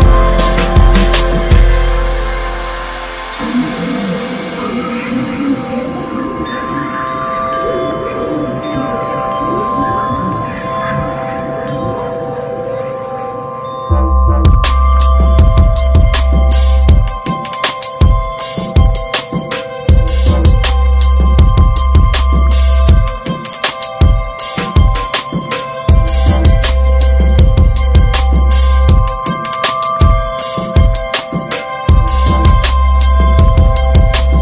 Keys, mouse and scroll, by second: 0.0 shift+click, 0.6 shift+click, 1.4 ctrl+z, 1.8 shift+click, 2.1 shift+click, 2.4 shift+click, 2.8 shift+click, 3.1 shift+click, 3.5 shift+click, 3.8 shift+click, 4.1 shift+click, 4.3 shift+click, 5.0 middle click, 7.7 middle click, 8.1 x, 9.1 Tab, 9.2 click, 9.5-9.9 middle drag, 9.9 click, 10.0 right click, 10.4 scroll down 2, 10.6-11.6 middle drag, 11.6 scroll up 1, 11.8 click, 12.1-13.7 middle drag, 13.7 Tab, 13.9 middle click, 14.0-14.4 scroll up 3, 14.4 shift+middle click, 15.0 3, 15.6-16.8 drag, 17.1-18.2 middle drag, 18.2 alt+shift+click, 18.5 alt+shift+click, 19.4 alt+shift+click, 19.8-20.8 shift+middle drag, 20.8 shift+d, 21.5 middle click, 22.1-22.6 scroll up 1, 22.6-24.6 middle drag, 24.6 e, 26.0 middle click, 26.2 scroll up 1, 26.9 click, 27.9 alt+shift+click, 28.3 middle click, 29.2 alt+s, 31.2-32.4 middle drag, 32.4 click, 33.4 alt+shift+click, 33.8 middle click, 34.3 alt+s.